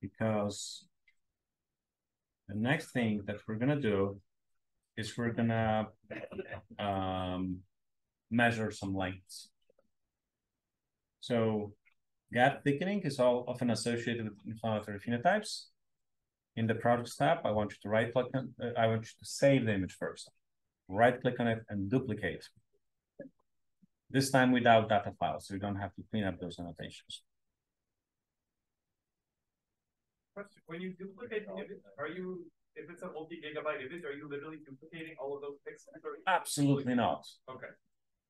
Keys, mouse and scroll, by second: 2.1 super+Page_Down, 4.7 super+Page_Down, 6.7 super+Page_Down, 34.9-37.4 right drag.